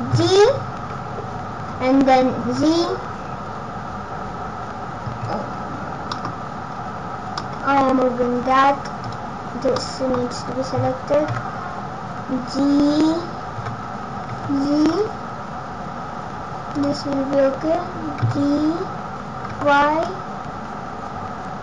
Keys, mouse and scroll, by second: 0.1 g, 5.5 scroll down 4, 6.1 middle click, 6.1 scroll down 2, 6.7-7.3 scroll down 4, 7.3 middle click, 7.9-8.3 scroll down 2, 9.0 click, 9.8 middle click, 10.2 scroll down 1, 11.5 KP_0, 13.6 g, 18.2 g.